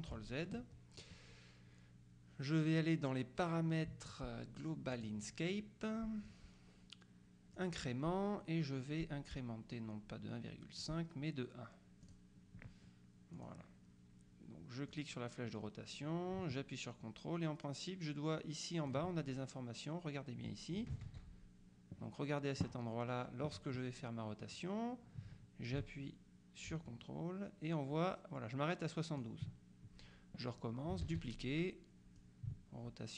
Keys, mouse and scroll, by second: 0.2 z, 5.0 click, 7.6 click, 10.9 click, 12.1 click, 13.4 click, 15.0-19.5 drag, 21.1 ctrl+z, 24.6-29.8 drag, 31.2 ctrl+d, 32.3-33.1 drag.